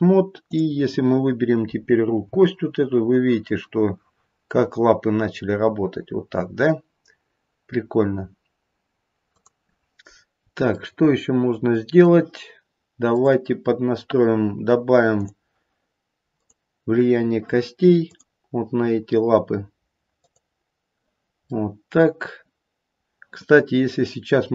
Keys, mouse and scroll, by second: 0.4 click, 2.3 g, 10.1-10.8 scroll up 2, 10.8 middle click, 13.1 click, 15.1 click, 18.0 click, 21.4 middle click, 21.6 middle click.